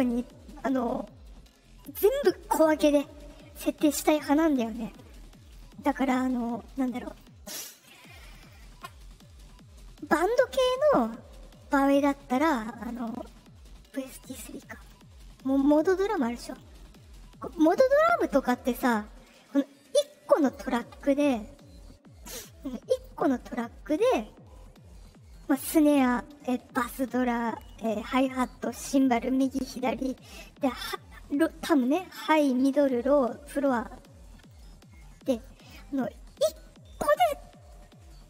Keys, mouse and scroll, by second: 7.0 click, 7.4 click, 8.3 click, 12.8 click, 17.4 click, 19.9 click, 22.5 click, 35.4 click, 38.2 click.